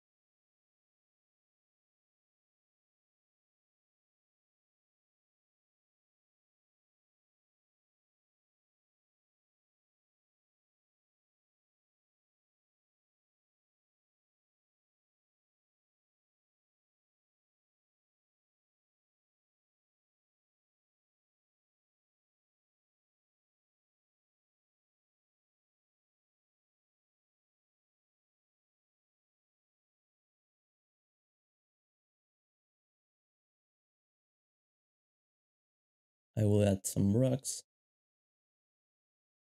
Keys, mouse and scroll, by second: 0.0-1.2 typing, 2.4 g, 2.9 alt+d, 2.9 shift+z, 4.2-8.1 typing, 7.0 shift+click, 7.9 shift+middle click, 9.1 g, 10.3 alt+shift+d, 12.3-14.3 typing, 14.5 alt+a, 17.3-19.5 typing, 17.5 alt+d, 19.4 shift+middle click, 19.5 alt+d, 20.4 alt+shift+z, 21.1 shift+middle click, 21.3 alt+d, 21.3-22.1 typing, 23.3-30.2 typing, 26.0 shift+scroll up 1, 26.0 shift+scroll down 1, 26.1 alt+shift+d, 27.4 alt+d, 29.4 alt+d, 30.4 alt+g, 30.6 alt+a, 31.0 shift+middle click, 31.6 ctrl+b, 32.6 shift+middle click, 34.8-35.6 typing.